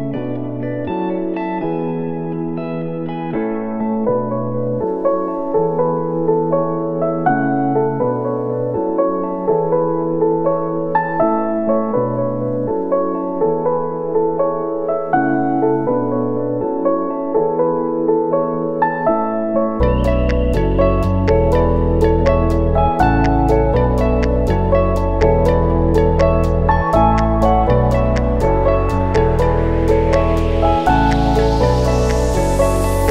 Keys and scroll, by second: 4.7 ctrl+c, 6.6 ctrl+v, 8.3 v, 14.4 ctrl+s, 26.0 space, 29.8 9, 30.1 8, 30.4 Return.